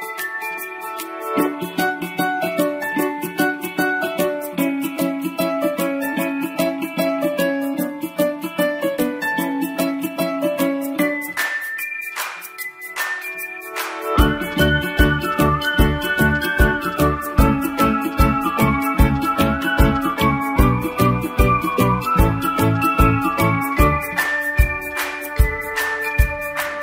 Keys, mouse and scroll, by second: 0.1 click, 4.0 i, 7.3 click, 17.7 click, 18.7-19.0 typing, 19.9 click, 23.7 click.